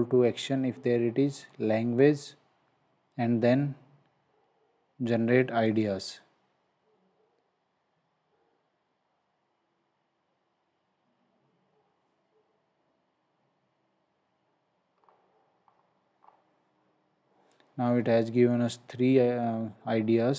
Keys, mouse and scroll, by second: 1.4-2.0 scroll down 1, 5.7 click, 14.9-15.6 scroll up 1, 17.5 scroll down 1.